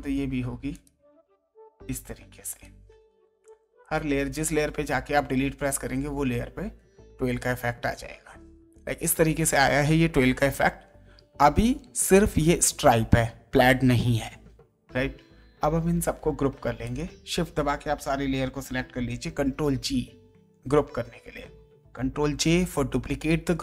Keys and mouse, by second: 0.7 click, 1.1 Delete, 2.5 click, 2.7 Delete, 3.8 click, 4.2 Delete, 5.4 ctrl+d, 16.8 shift+click, 19.3 ctrl+g, 22.3 ctrl+j.